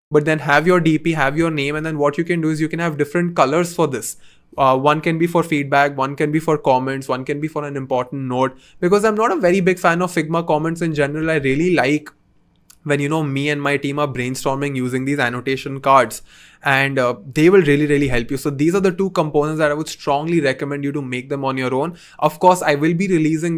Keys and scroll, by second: 8.8 c, 10.5 Escape, 11.3 v, 15.4 BackSpace.